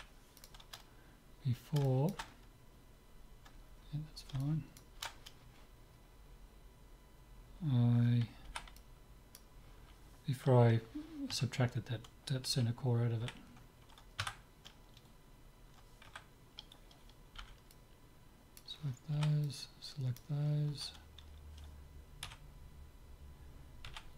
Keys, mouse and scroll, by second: 1.5-3.8 middle drag, 3.8-4.5 scroll down 1, 4.5-6.3 middle drag, 8.5 b, 11.3 Tab, 12.6 z, 13.3 z, 14.3 Tab, 16.1 a, 17.4 b, 19.1 b, 22.3 e.